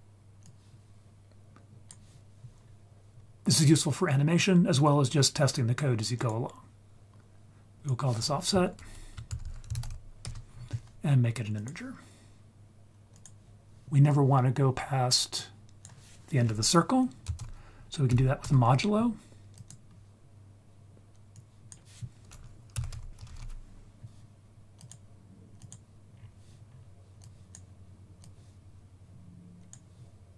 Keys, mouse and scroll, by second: 0.4-1.9 drag, 2.6-3.2 scroll up 2, 6.1 click, 7.8 ctrl+z, 7.8-10.2 drag, 9.4 f, 11.5-13.2 drag, 13.8 scroll down 2, 15.3-18.4 drag, 19.6 click, 21.3-24.9 drag, 25.6 click, 26.1-26.6 scroll down 3, 26.6-27.2 scroll up 2, 27.2 click, 27.2-27.6 scroll up 1, 28.2-29.7 drag.